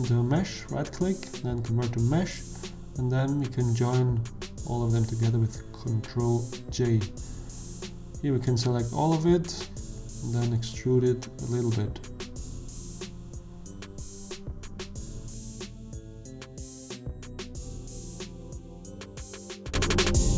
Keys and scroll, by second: 4.0 ctrl+j, 6.0 Tab, 7.7 a, 10.7 e, 16.1 ., 16.3 0, 16.5 1, 17.1 Return, 18.8 Tab, 19.9 s.